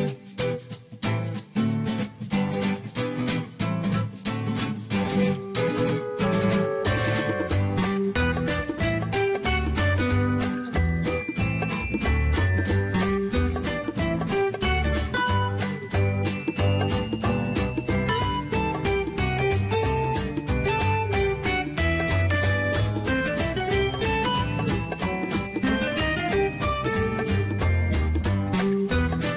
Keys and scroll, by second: 25.6-26.7 typing.